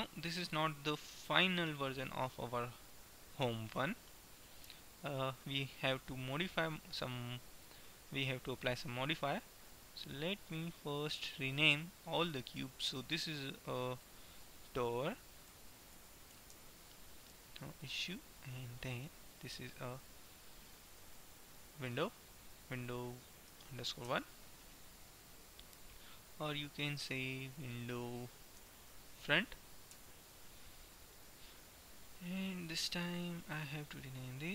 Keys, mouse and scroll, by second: 4.1-6.6 middle drag, 8.7-11.9 drag, 12.2-14.1 right drag, 14.1-16.1 drag, 16.2 o, 18.7-20.7 right drag, 19.9-21.9 drag, 25.2-26.9 middle drag, 26.9-29.1 drag, 31.1-33.6 middle drag, 33.6-34.5 right drag.